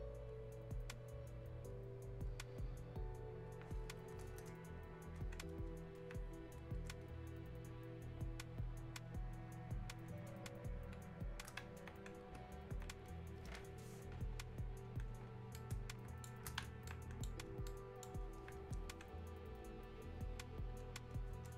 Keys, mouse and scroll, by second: 6.0-15.0 alt+drag, 15.5-16.9 right drag, 16.9-20.8 alt+right drag, 21.1 click.